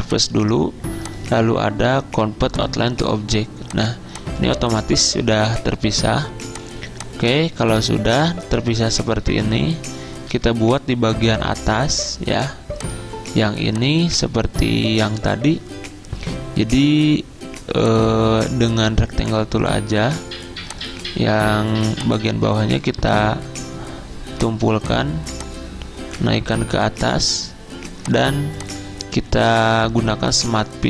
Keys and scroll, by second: 4.9 ctrl+z, 10.3 z, 11.3 z.